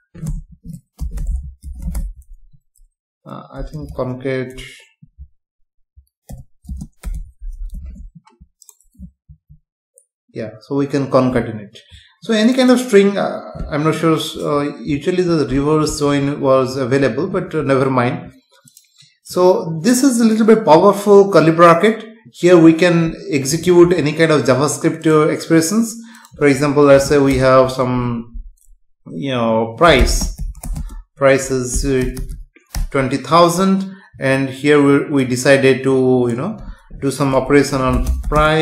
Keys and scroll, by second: 0.3 BackSpace, 5.0 Left, 6.7 space, 7.7 ctrl+s, 9.3 F5, 27.3 Return, 30.7 space, 38.3 space.